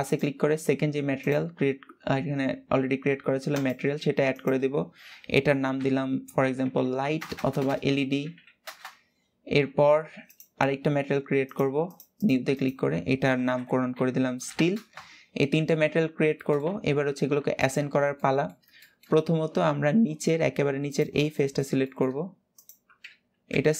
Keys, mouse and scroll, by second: 8.3 BackSpace, 10.0-14.4 drag, 14.4 e, 15.7 scroll down 2, 16.0 shift+middle click, 16.4 Tab, 16.6-17.3 scroll up 2, 17.3 shift+middle click, 17.6 scroll up 1, 17.8-18.9 middle drag, 18.9-19.9 scroll up 1, 19.9-20.5 scroll up 1, 20.5 click, 21.0 middle click, 21.8-22.3 scroll up 1, 22.3 click, 22.7 alt+z, 23.2 alt+z, 23.5-23.7 middle drag.